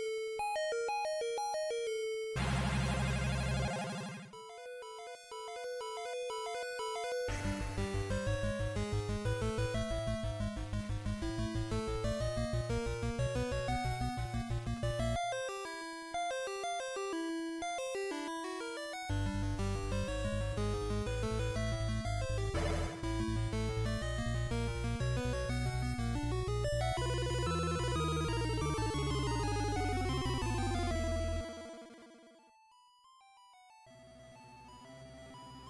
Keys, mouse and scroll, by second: 1.6-2.1 scroll up 1, 2.1-2.7 scroll up 2, 5.9 click, 11.0 click, 14.1 click, 16.3 click, 21.0 click, 24.9 click, 27.9-29.9 scroll down 1, 29.9 click, 34.6 click.